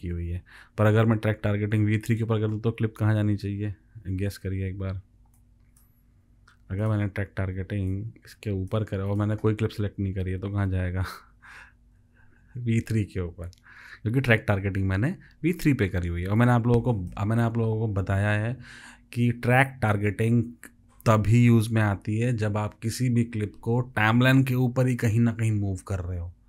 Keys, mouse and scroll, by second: 3.3 ctrl+z, 11.8 ctrl+v.